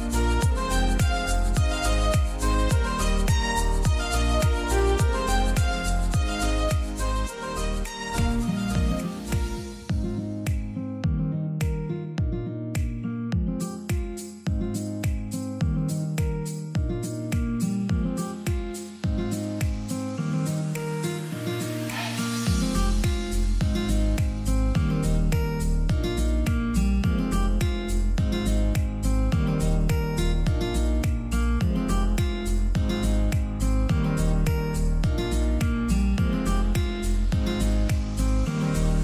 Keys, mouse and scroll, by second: 3.6-5.8 scroll down 1, 5.8-10.2 drag, 10.2 shift+right click, 12.3 click, 16.2-19.3 drag, 29.4 scroll down 1, 32.2 scroll up 1, 32.2 click, 33.3 Left, 38.8 click.